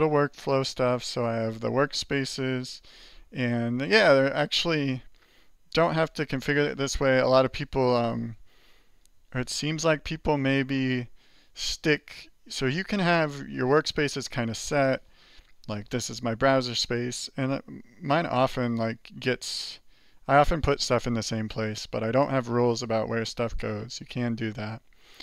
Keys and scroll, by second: 0.0 alt+1, 0.2 alt+2, 0.5 alt+3, 0.9 alt+4, 2.4 alt+7, 3.0 alt+8, 3.4 alt+1, 4.1 alt+2, 4.5 alt+3, 6.0 alt+7, 6.7 alt+8, 7.1 alt+2, 7.5 alt+1, 8.1 alt+3, 8.5 alt+4.